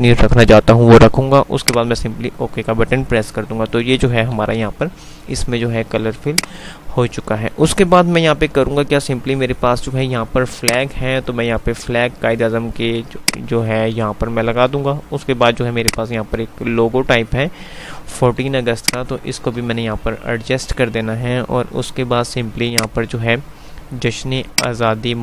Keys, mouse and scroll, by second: 4.1 click, 4.4 F5, 6.4 click, 6.6 F3, 10.7-12.7 drag, 14.1 typing, 18.6 F2, 18.9 click, 19.2-19.9 F2, 20.7 F3, 22.9 click.